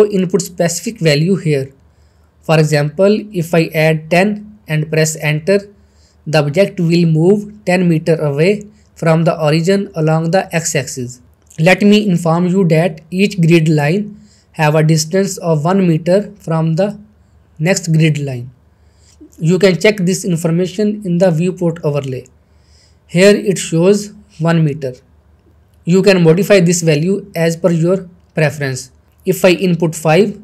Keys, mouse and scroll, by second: 3.9 middle click, 4.5-5.4 shift+middle click, 5.6-6.6 shift+middle drag, 7.1-7.4 scroll down 1, 7.5-8.4 shift+middle drag, 11.3 scroll up 1, 12.1 middle click, 12.5 scroll up 1, 12.8 shift+middle click, 22.2 shift+middle click, 23.9 click, 26.6 click, 29.0 click.